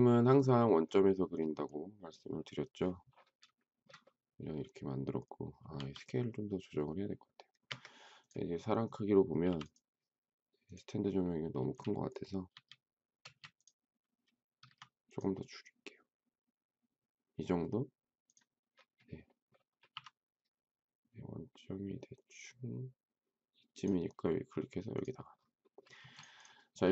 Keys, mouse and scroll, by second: 3.5 shift+middle click, 5.7 s, 7.7 Escape, 9.4 m, 11.6 space, 12.5 s, 13.2 space, 14.6 s, 19.9 m, 25.9 space.